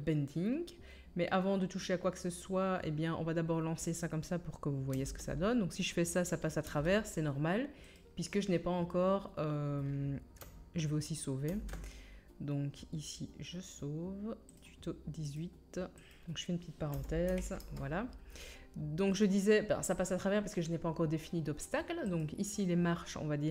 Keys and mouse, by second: 4.9 space, 6.6 middle click, 6.7 space, 7.0-8.2 middle drag, 11.5 ctrl+s, 22.2-23.5 right drag.